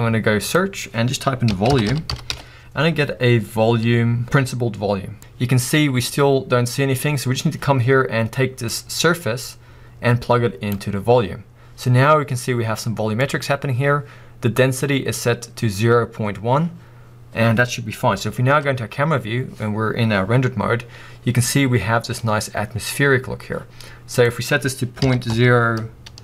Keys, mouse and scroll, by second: 2.5-3.3 scroll up 1, 3.3-4.1 scroll up 1, 4.1-5.0 scroll up 1, 5.2-10.7 drag, 18.6 KP_0, 19.5-19.9 scroll up 2, 24.5-26.2 drag.